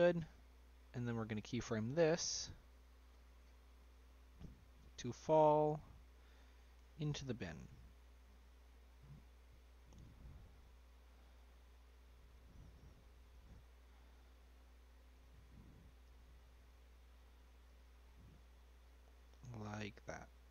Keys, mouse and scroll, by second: 0.0 middle click, 0.7-2.4 scroll up 2, 2.4-7.0 drag, 7.0 g, 8.6-9.1 middle drag, 9.1 scroll down 1, 9.2-10.3 middle drag, 10.3 f, 11.3 g, 13.3 g, 16.0 g, 18.0 scroll up 2, 18.2-20.5 middle drag.